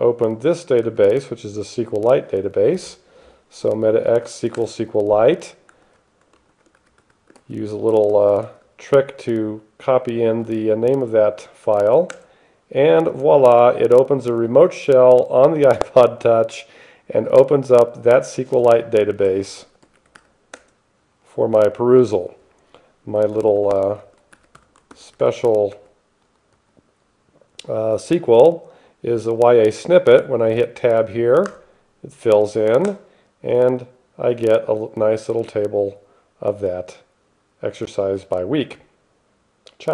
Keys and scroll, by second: 0.0-0.8 typing, 1.1 Tab, 4.8 Return, 6.1-8.4 typing, 7.6 alt+/, 8.7 alt+/, 12.4 Return, 19.3-20.9 typing, 23.4-27.0 typing, 31.7 Tab, 33.1 Return.